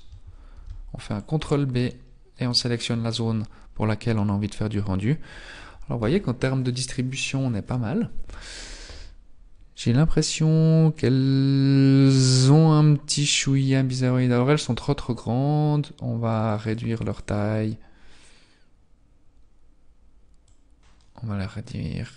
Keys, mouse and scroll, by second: 0.5 ctrl+b, 7.1 scroll up 1, 16.6 click, 16.8 click, 17.0 click, 17.2 click, 17.5 click, 17.7 click, 21.1 click.